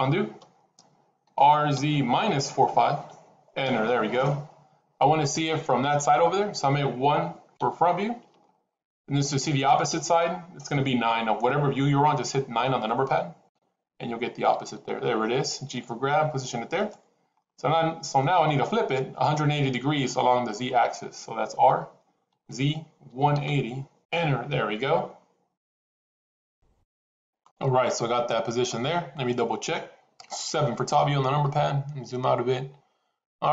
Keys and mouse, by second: 1.1 r, 7.5 KP_1, 13.3 KP_9, 15.6 g, 17.3-18.1 shift+middle drag, 21.4 r, 30.7 KP_7.